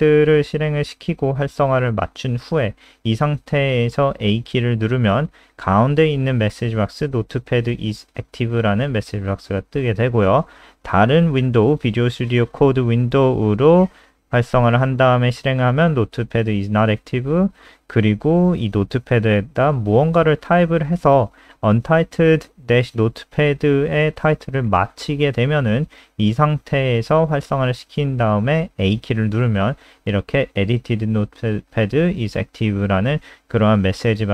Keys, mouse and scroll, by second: 0.3 Return, 1.1 click, 1.2 ctrl+alt+space, 2.7 click, 5.7 a, 11.8 click, 13.7 a, 16.2 click, 17.4-18.6 typing, 22.0 click, 27.3 a, 33.3 alt+F4.